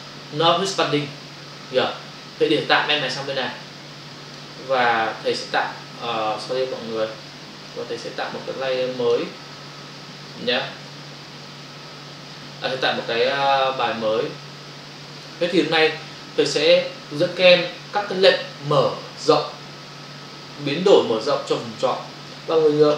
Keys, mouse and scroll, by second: 3.0 click, 7.7 click, 12.7 click, 14.2 Return.